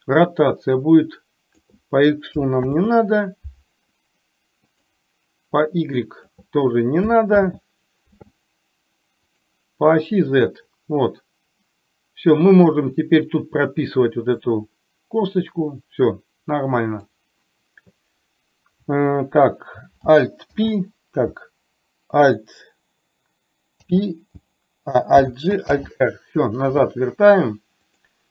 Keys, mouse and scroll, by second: 0.9 click, 2.7 ctrl+z, 4.8 click, 5.7 click, 7.4 ctrl+z, 10.3-12.9 drag, 14.4-17.2 drag, 20.5 alt+h, 23.8 alt+h, 25.7 alt+r, 27.9 click.